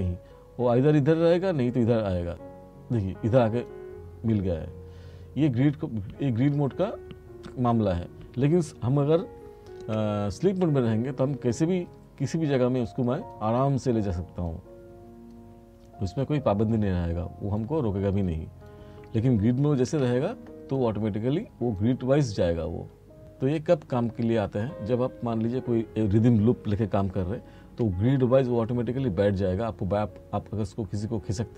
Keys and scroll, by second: 9.9 F2, 19.9 F4, 27.3 r.